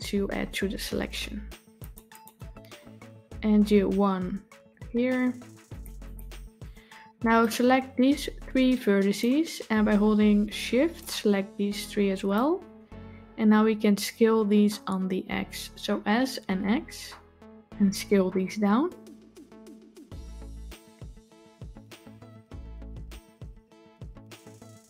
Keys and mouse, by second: 4.4 ctrl+r, 6.4 click, 7.5-9.1 drag, 11.0-12.2 shift+drag.